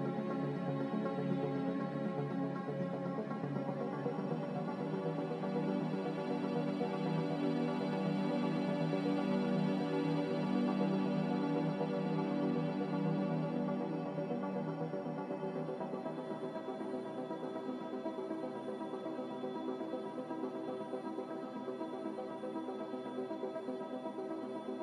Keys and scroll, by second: 3.7 z, 21.8 Delete, 24.7 ctrl+z.